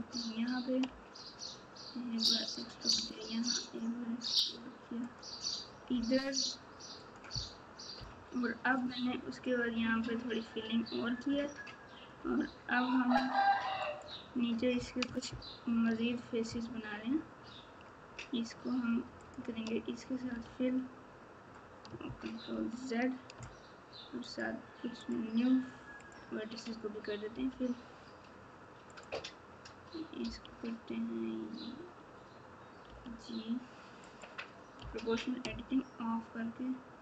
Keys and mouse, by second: 12.2 e, 15.6 ctrl+z.